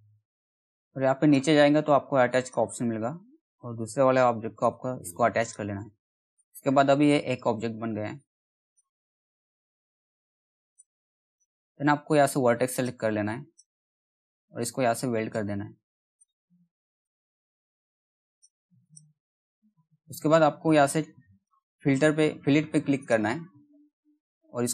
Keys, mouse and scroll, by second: 4.1 right click, 4.9 click, 6.4-7.7 scroll down 1, 7.7-9.8 drag, 9.8 ctrl+z, 10.2-24.7 drag.